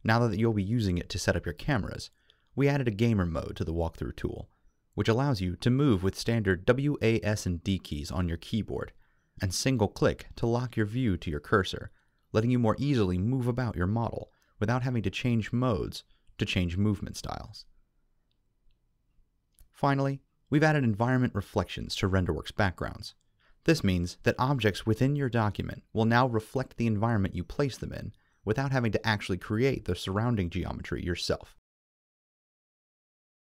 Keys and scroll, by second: 0.2 w, 7.4 w, 12.0 d.